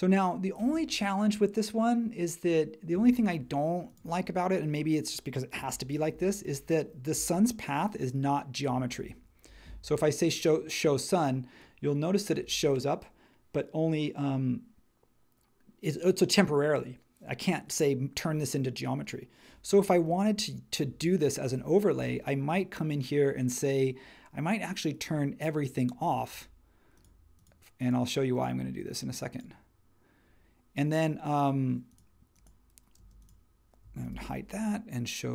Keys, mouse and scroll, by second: 5.6 h, 7.1 h, 8.9 space, 33.0 space, 34.0 super+e.